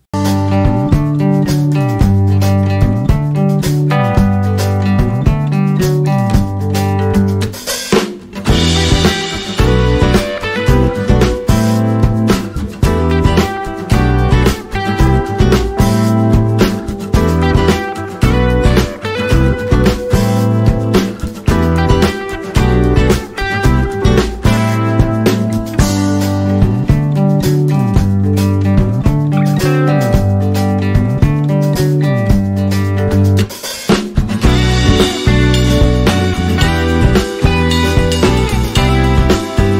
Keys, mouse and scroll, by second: 0.5 scroll down 1, 2.5 click, 6.8 alt+scroll down 1, 10.2 alt+scroll up 2, 18.5 alt+click, 25.7 click, 28.4 ctrl+d.